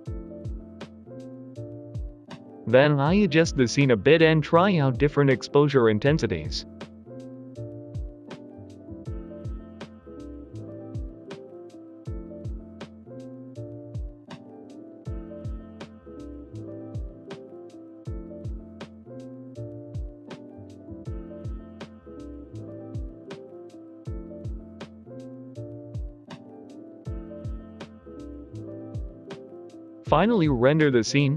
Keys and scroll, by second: 1.3 Down, 4.8 ctrl+z, 6.1 Right, 8.4-9.4 typing, 8.6 Escape, 9.0 Return, 9.4 Return, 9.9 Delete, 10.0 ctrl+z, 10.5 Delete, 10.9 g, 11.1 i, 11.2 Return, 12.4 typing, 12.5 Escape, 12.9 Return, 13.1 ctrl+c, 13.4 ctrl+v, 14.3 g, 15.2 ctrl+z, 15.4 Delete, 17.4-19.4 typing, 21.2 typing, 23.0-25.9 typing, 27.8 Escape, 30.9 BackSpace, 31.1 Return.